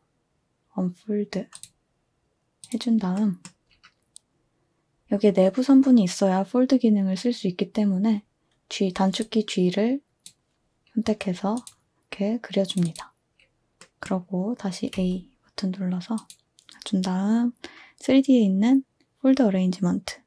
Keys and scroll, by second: 14.9 a.